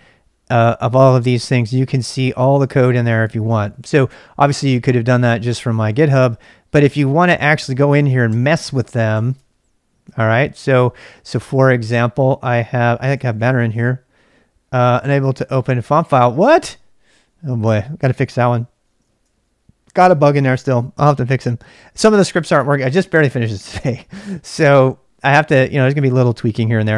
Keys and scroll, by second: 2.5-4.3 typing, 5.3-11.4 typing, 12.9-19.3 typing, 22.0-22.9 typing.